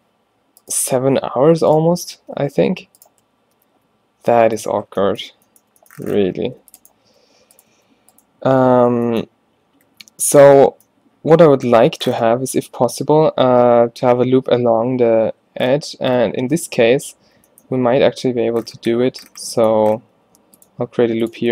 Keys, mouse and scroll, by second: 2.3 shift+Tab, 2.3 g, 2.4 g, 3.5 shift+Tab, 3.8 g, 6.7 ctrl+r, 7.1 s, 7.8 s, 8.8 shift+Tab, 9.9 a, 15.7 middle click, 20.1 ctrl+r.